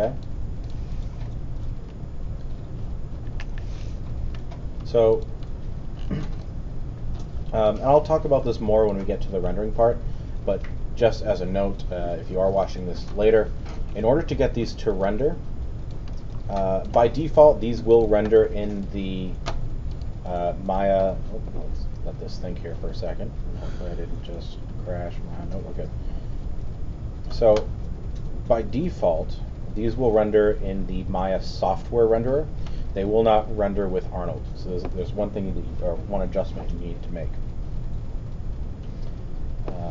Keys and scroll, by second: 3.4 Delete, 4.2 alt+BackSpace.